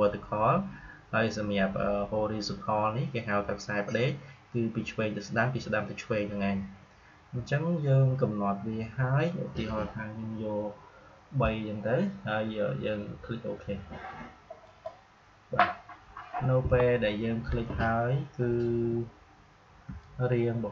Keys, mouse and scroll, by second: 18.2-18.7 scroll up 1, 19.8 space.